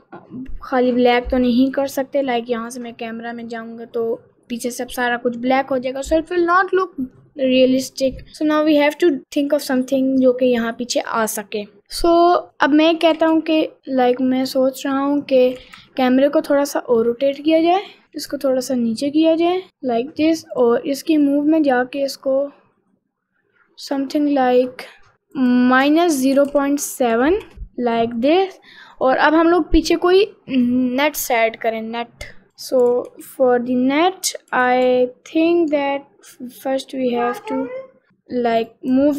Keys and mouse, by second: 1.5 click, 2.7 click, 3.3 click, 13.0 r, 13.2 x, 15.6 r, 18.0 g, 20.6 click, 21.3-25.1 drag, 25.4-27.5 drag, 28.3 click, 32.6 click, 32.9 g, 34.6 g, 38.1 middle click, 38.8 click.